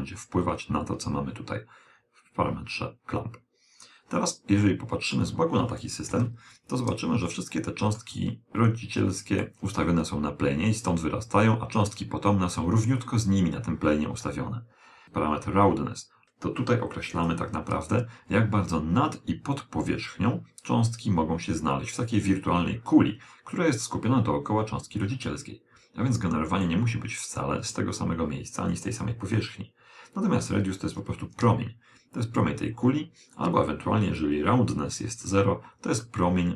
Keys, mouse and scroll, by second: 4.7-6.4 middle drag, 6.2 KP_1, 7.4-11.0 middle drag, 15.0 click, 23.9-25.7 middle drag, 31.0 click, 34.2 click, 36.1-36.5 middle drag.